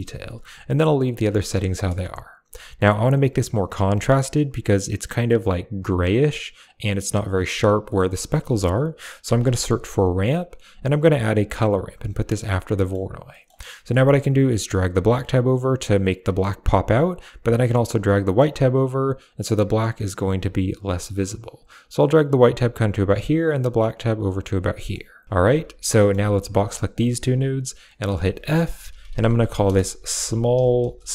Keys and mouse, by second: 0.8 click, 1.2 middle click, 1.6 middle click, 2.2 click, 7.7 middle click, 8.1 shift+a, 11.1 shift+a, 11.7 click, 12.0 click, 14.6-17.0 drag, 17.6-18.9 drag, 19.3 click, 20.2-20.9 drag, 21.7 click, 23.3 click, 24.2 click, 24.6 middle click, 25.0 click, 25.3 g, 25.6 click, 25.8 middle click, 26.2 g, 26.4 click, 26.9 middle click, 28.0 f, 29.2 l.